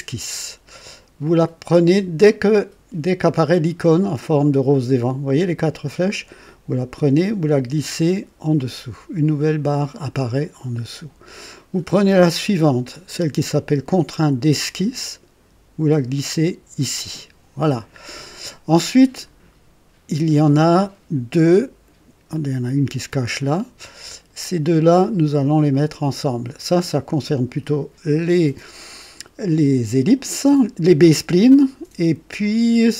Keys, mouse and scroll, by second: 5.5-9.6 drag, 14.6-16.8 drag, 22.3-25.8 drag.